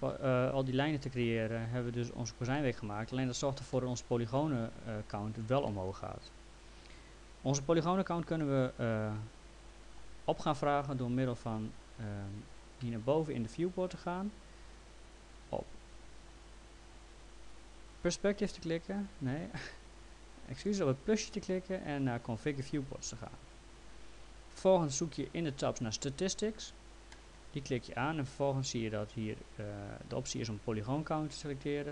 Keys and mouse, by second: 2.6 alt+middle click, 3.7 middle click, 5.7 middle click, 11.5 click, 15.0 click, 17.5 click, 19.8 click, 22.7 click, 27.1 click.